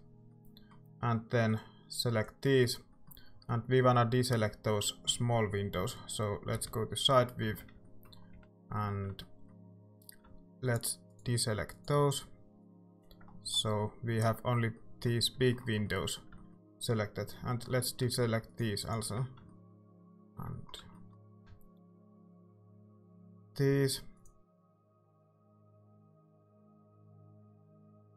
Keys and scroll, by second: 5.8-8.9 typing.